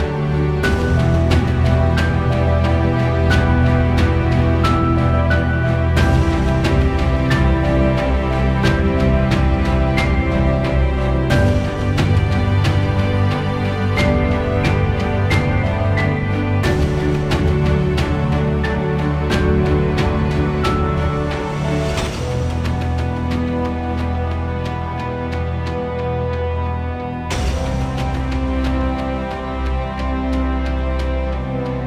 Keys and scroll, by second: 5.4 1, 5.8 Return, 14.7 0, 15.6 ., 16.5 5, 17.0 Return, 23.8 0, 24.4 /, 25.0 5, 25.4 Return, 31.2 1.